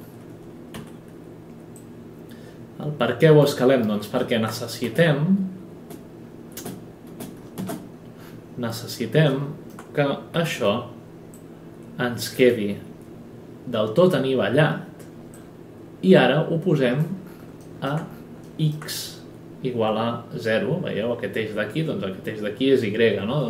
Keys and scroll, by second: 0.7 r, 5.0 space, 7.1 space, 10.3 w.